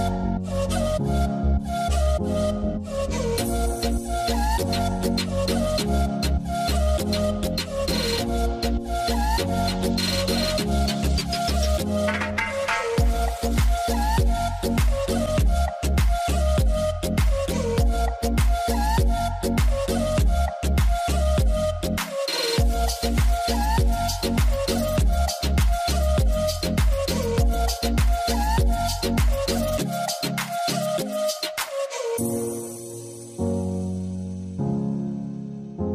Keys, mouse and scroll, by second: 30.5 double click.